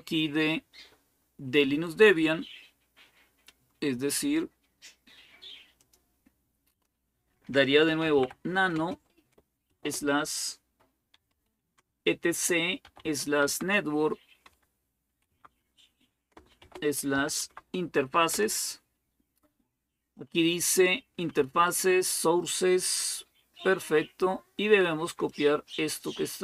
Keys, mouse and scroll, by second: 5.6 click, 6.5 click, 7.4-9.5 typing, 10.7-14.9 typing, 16.2-17.5 typing, 18.1 Return, 21.0 Down, 21.2 Down, 21.4 Down, 25.1-26.4 drag.